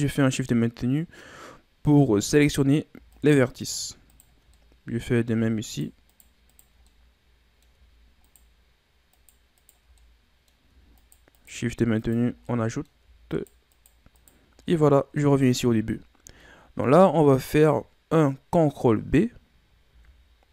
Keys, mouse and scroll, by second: 3.1 shift+right click, 3.6 shift+right click, 4.1 shift+right click, 4.5-5.6 middle drag, 5.6 shift+right click, 6.1 shift+right click, 6.5 shift+right click, 6.8-8.2 middle drag, 8.2 shift+right click, 9.1 shift+right click, 9.6 shift+right click, 10.0-11.0 middle drag, 11.0 shift+right click, 11.3 shift+right click, 12.0 shift+right click, 12.5 middle click, 13.3 shift+right click, 13.7 shift+right click, 14.1 shift+right click, 14.7-15.9 middle drag, 15.9 ctrl+scroll up 2, 16.4-19.4 middle drag, 19.9 ctrl+b.